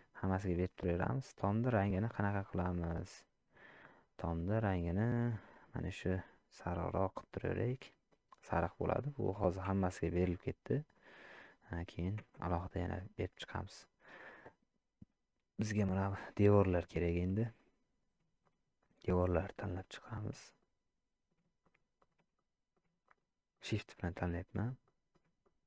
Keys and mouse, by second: 1.5 click, 10.3-10.9 middle drag, 12.6 middle click, 13.9 middle click, 16.8 shift+click, 18.5 shift+click, 18.9 shift+click, 19.5 shift+click, 20.6 middle click, 22.0 shift+click, 22.4 middle click, 23.1 shift+click, 23.5-24.6 middle drag, 24.8 middle click, 25.4 shift+middle click.